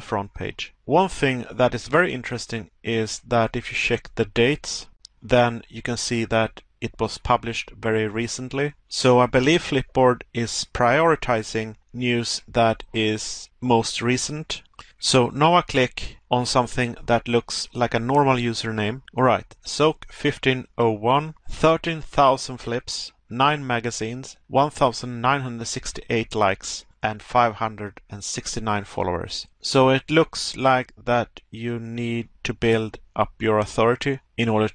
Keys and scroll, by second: 0.2 Pause, 3.8 Pause, 7.3 Pause, 20.1 Pause, 23.2 Pause, 25.5 Pause, 28.0 Pause.